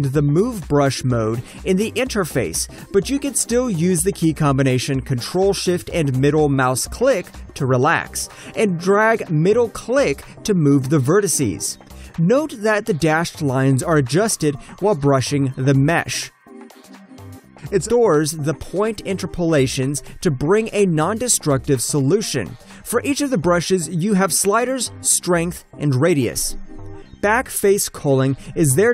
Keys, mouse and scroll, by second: 4.5 alt+middle click, 5.3 shift+middle click, 6.1 alt+click, 6.9 middle click, 8.3 alt+middle click, 9.1 middle click, 10.4 middle click, 11.5 alt+middle click, 11.9 shift+middle click, 12.7 alt+click, 13.6 middle click, 15.6 alt+click, 16.0 shift+middle click, 16.9 alt+click, 18.5 middle click, 19.4 alt+click, 20.1 middle click, 21.2 shift+middle click, 22.2 alt+click, 23.6 middle click, 24.1 alt+click.